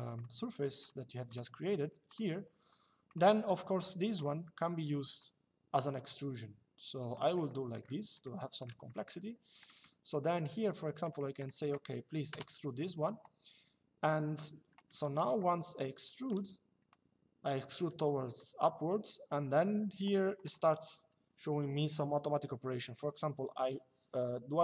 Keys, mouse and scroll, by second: 2.2 Escape, 2.8 click, 4.9 click, 7.1 middle click, 8.0 shift+middle click, 10.8 click, 12.0 e, 15.1 shift+middle click, 16.6 click, 20.1 click.